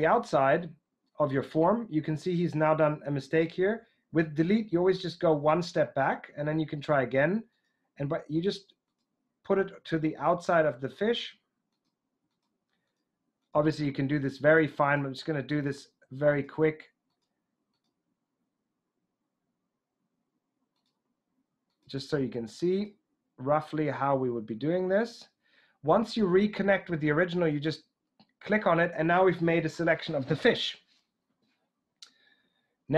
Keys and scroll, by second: 3.6 BackSpace, 5.0 BackSpace.